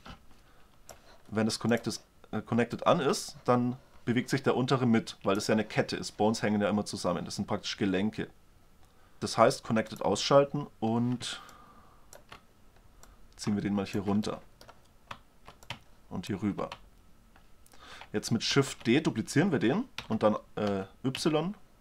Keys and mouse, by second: 1.9-4.9 drag, 10.1-14.9 drag, 14.9-16.4 middle drag, 16.4-17.6 drag, 18.7 shift+d.